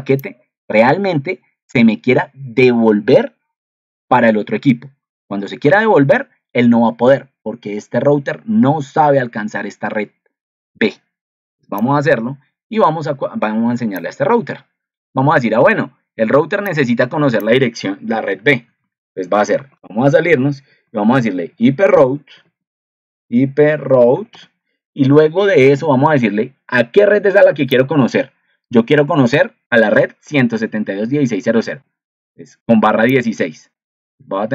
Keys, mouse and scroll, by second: 29.8 ctrl+2.